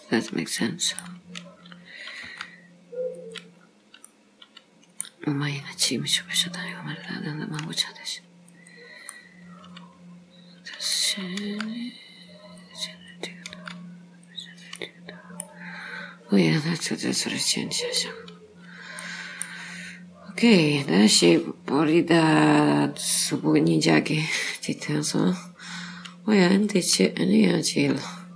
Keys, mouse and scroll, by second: 0.6 middle click, 2.3 g, 3.6-4.1 scroll down 3, 4.1 middle click, 5.4 scroll up 3, 6.6 click, 7.6 click, 8.6 click, 9.2 middle click, 11.6 g, 13.2 click, 13.6 g, 14.9 middle click, 15.8 scroll down 2, 16.9-17.3 scroll down 4, 17.3 middle click, 18.4 scroll up 3, 19.1 middle click, 19.8-21.4 scroll down 6.